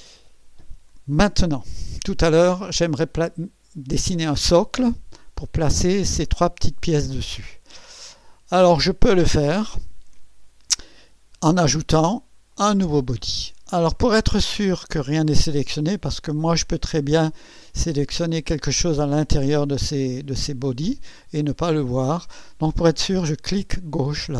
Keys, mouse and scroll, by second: 12.5 click, 14.4 click, 17.7 click, 18.9 click, 24.0 click.